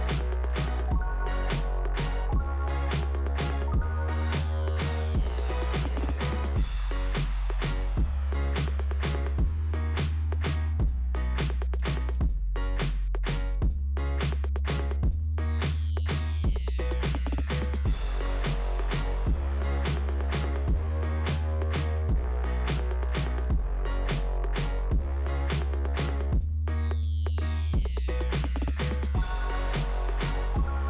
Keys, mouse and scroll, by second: 0.3-0.8 scroll down 1, 0.8 middle click, 2.6 middle click, 4.2 click, 4.3 click, 6.1 click, 11.7 scroll down 2, 13.0 middle click, 17.1 click, 18.1 click, 22.5 scroll up 2, 23.2 click, 23.4 click, 24.8 click, 24.8 click, 26.4 click, 26.5 click, 27.6 click, 27.7 click, 29.0 scroll down 2.